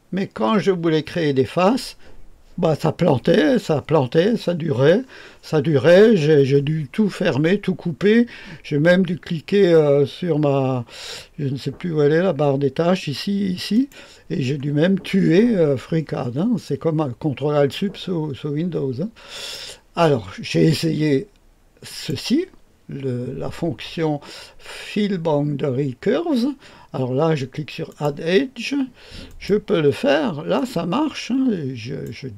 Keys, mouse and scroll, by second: 13.7 click, 19.3 click, 21.8 click, 27.8 click, 29.2 click, 30.5 click.